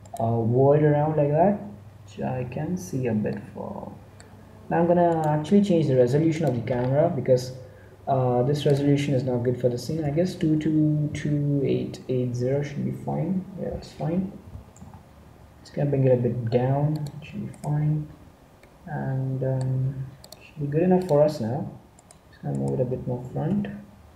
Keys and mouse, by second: 0.0-1.9 right drag, 4.0-5.2 middle drag, 5.2 right click, 6.3-8.7 middle drag, 9.9 8, 10.4 KP_0, 14.4 g, 17.4-19.0 right drag, 23.2 g.